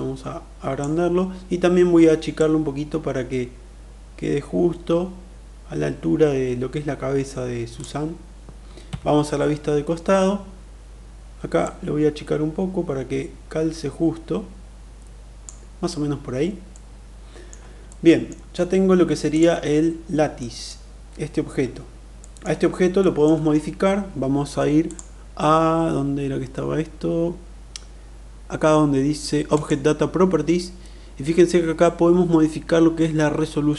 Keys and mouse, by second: 2.3-7.6 drag, 8.9 KP_3, 11.6-15.3 drag, 16.6-17.5 middle drag, 17.9-18.3 middle drag, 19.1 click, 20.2 middle click, 22.2 middle click, 23.0 middle click, 29.5 click.